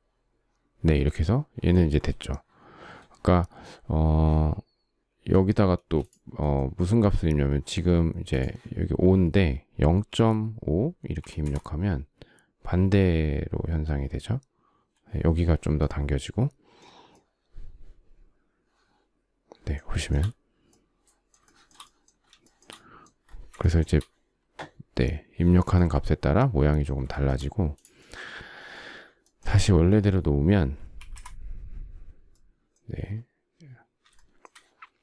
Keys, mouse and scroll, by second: 5.4 space, 9.7-11.3 typing, 19.5 shift+middle click, 21.1 shift+middle click, 22.0 shift+middle click, 22.2 shift+middle click, 23.4 shift+middle click, 26.7 shift+middle click, 30.6 1, 30.7 Return, 33.8 shift+middle click.